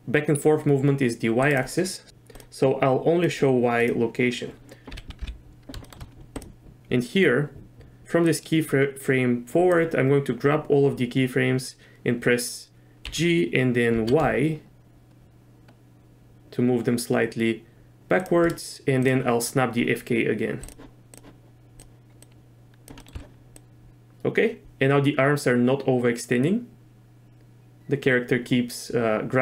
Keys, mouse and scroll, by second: 2.3-3.4 drag, 4.9 a, 5.2 KP_Decimal, 5.8 shift+click, 6.4 click, 8.3-9.8 drag, 13.0 g, 21.1-22.9 drag, 23.0 middle click, 23.2 z, 23.6-29.4 drag.